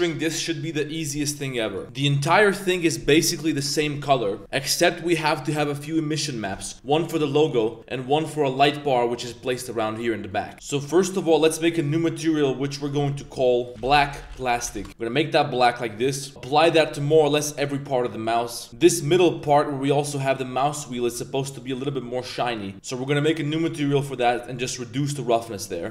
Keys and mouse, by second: 0.3-0.7 middle drag, 1.2 drag, 1.8 middle click, 2.2 middle click, 3.5 middle click, 4.9-5.4 middle drag, 5.8 middle click, 6.2 click, 6.5 middle drag, 7.0 middle drag, 7.6 drag, 7.7 middle click, 9.3-9.8 middle drag, 10.3 middle click, 11.4 click, 12.8 click, 13.4 click, 13.7-14.8 drag, 16.3 click, 17.1 middle click, 17.5 click, 18.3 click, 18.7 z, 18.8 middle click, 19.1 g, 19.6 click, 21.2 click, 22.7 g, 24.5-25.9 drag.